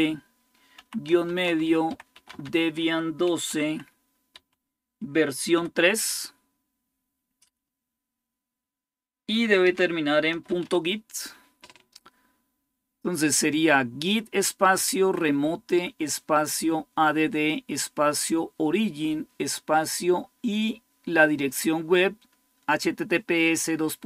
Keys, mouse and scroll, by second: 0.6-4.1 typing, 5.3 typing, 9.4-10.9 typing.